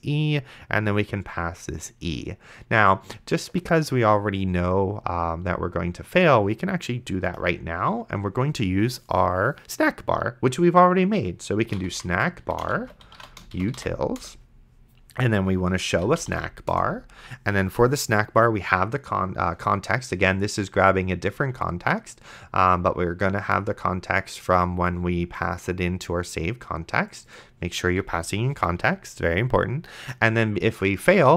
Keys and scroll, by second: 11.5-14.0 typing, 14.2 Return, 15.7-17.1 typing, 31.2-31.3 typing.